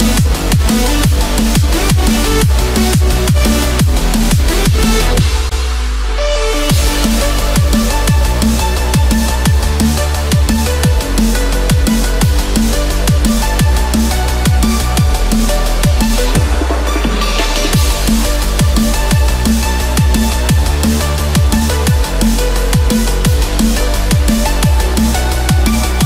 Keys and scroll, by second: 1.2 Escape, 2.6 ctrl+-, 4.0 ctrl+z, 9.6 Return, 10.1 Escape, 11.2 ctrl+-, 13.9 ctrl+=, 14.2 ctrl+space, 14.4 ctrl+=, 25.4 ctrl+-.